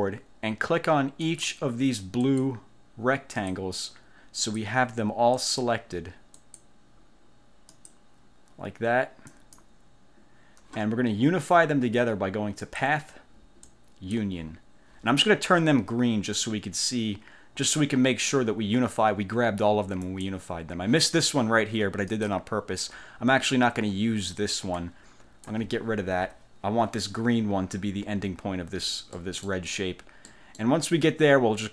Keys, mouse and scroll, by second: 1.3 shift+click, 2.3 shift+click, 3.5 shift+click, 4.5 shift+click, 5.5 shift+click, 6.5 shift+click, 7.9 shift+click, 9.5 shift+click, 12.8 click, 13.8 click, 20.1 click, 22.3 click, 24.9 click, 26.3 Delete, 29.3 click, 30.4 click.